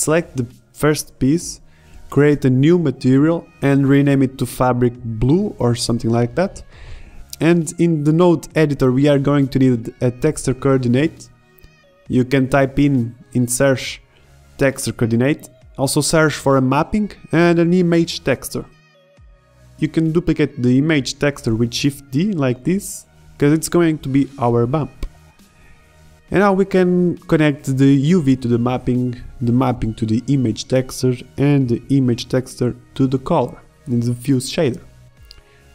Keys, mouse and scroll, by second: 1.5 click, 7.3-7.8 middle drag, 7.3-7.8 scroll up 1, 8.3-9.2 middle drag, 9.2 click, 11.1 shift+a, 15.6 shift+a, 17.3 middle click, 18.2 shift+a, 20.8 shift+d, 24.7-27.0 drag.